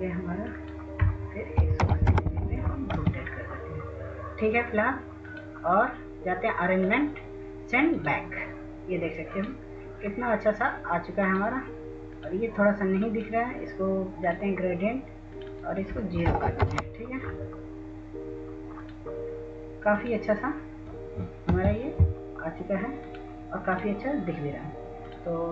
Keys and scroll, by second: 3.9-5.2 typing, 5.6 Tab, 7.6 typing, 19.0 0, 19.1 0, 19.4 Return, 24.2 w.